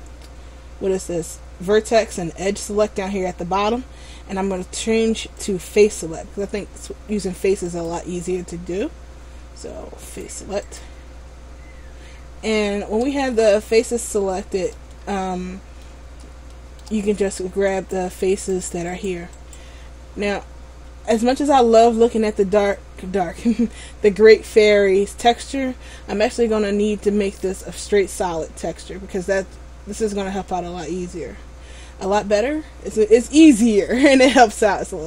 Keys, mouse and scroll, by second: 5.5 click, 11.7 scroll up 1, 13.5 shift+middle click, 13.5 scroll up 1, 16.6 shift+middle click, 17.9 right click, 18.6 right click, 21.9-22.7 scroll down 1, 26.0 scroll up 1, 27.6 click, 27.6-29.9 scroll up 6, 31.7-33.1 scroll up 1, 33.1 middle click.